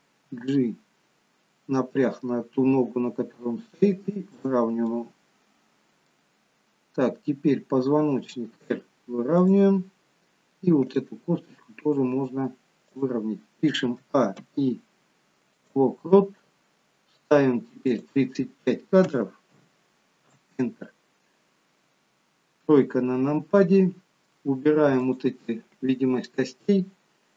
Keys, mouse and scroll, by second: 0.2 g, 4.9 middle click, 9.9-10.6 scroll up 3, 10.9 click, 11.5 r, 14.4 a, 14.4 i, 16.2-16.9 scroll down 1, 17.9 click, 17.9 scroll down 2, 22.7 KP_3, 25.1 click.